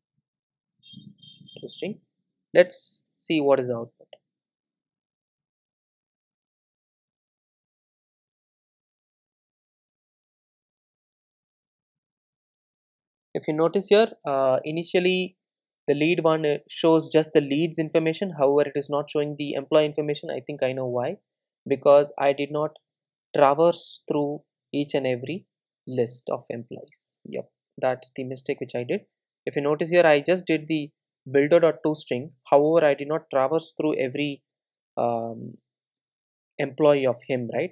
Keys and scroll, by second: 0.8 ctrl+shift+super+Down, 27.7 super+c.